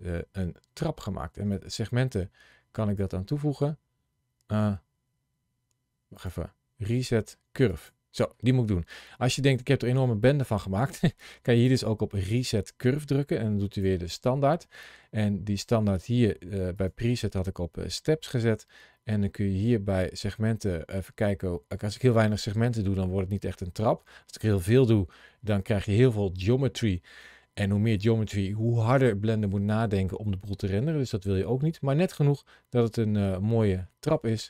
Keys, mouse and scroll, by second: 1.4 click, 3.2-5.4 scroll down 1, 6.0 click, 11.4 click, 16.6 click, 20.0 click.